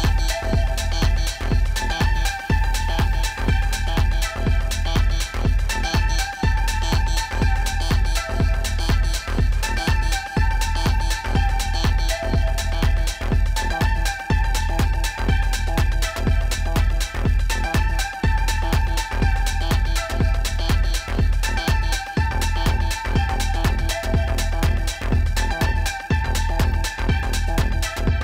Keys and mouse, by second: 0.0 click, 2.6 click, 4.8 click, 8.3 click, 10.2 click, 13.3 click, 15.0 click, 15.8 click, 16.7 click, 18.0 v, 18.6 click, 20.1 0, 21.3 click.